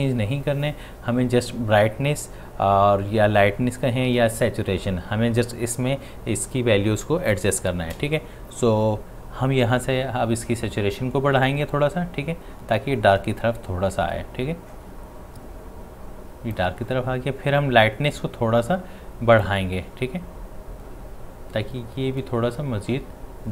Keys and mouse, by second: 11.7-18.9 drag, 19.4-23.5 drag.